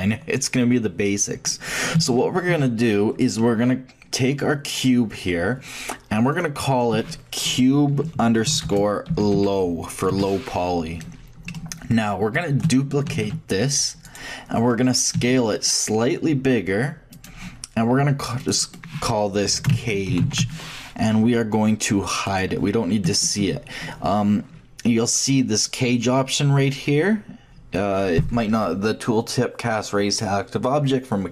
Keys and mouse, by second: 1.4-2.4 middle drag, 5.1-6.3 shift+middle drag, 6.3-8.5 drag, 11.5-13.1 middle drag, 13.1 shift+d, 15.1 s, 18.4-20.5 drag, 22.2-24.1 drag.